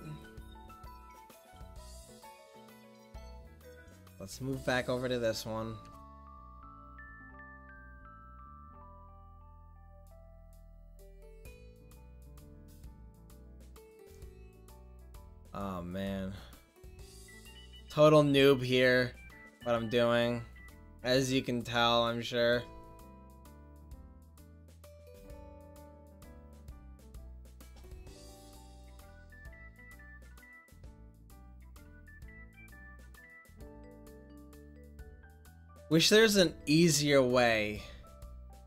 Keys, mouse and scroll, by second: 2.9-5.3 drag, 3.4 ctrl+z, 5.3 middle click, 11.0-14.1 drag, 15.4-16.4 middle drag, 17.8-18.4 drag, 21.1 middle click, 21.7-25.7 drag, 26.9 click, 26.9-31.4 middle drag, 33.6-34.7 drag, 34.7-35.1 middle drag.